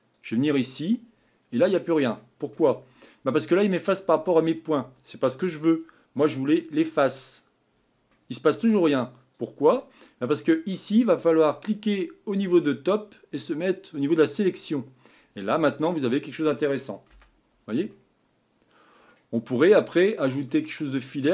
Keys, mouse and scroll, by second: 7.0-14.4 drag, 15.1-15.5 scroll down 2, 15.5-17.1 scroll up 4, 17.1 a, 17.6-18.0 scroll down 1, 18.0-19.4 middle drag, 19.4-20.5 scroll up 4, 20.5-21.3 middle drag.